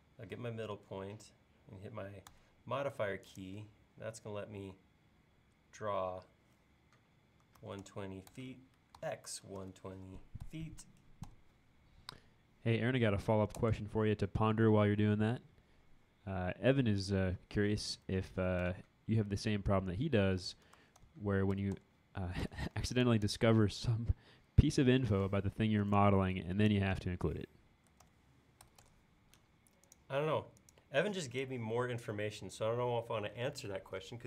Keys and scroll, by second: 7.2-8.1 typing, 10.1-10.5 typing, 13.6 Return, 18.0-22.2 typing, 25.1 p, 27.7-28.8 typing, 31.0 e, 33.5 space.